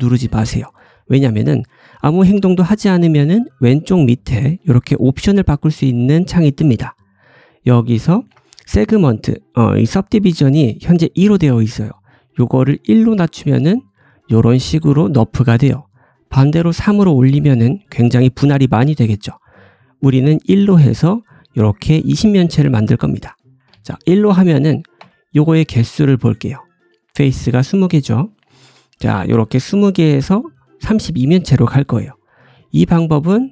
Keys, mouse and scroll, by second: 23.5 click, 24.0 g, 24.9 Tab, 27.0-28.3 drag, 28.3-33.5 middle drag, 28.6 Tab, 32.6 scroll up 1, 32.8 g.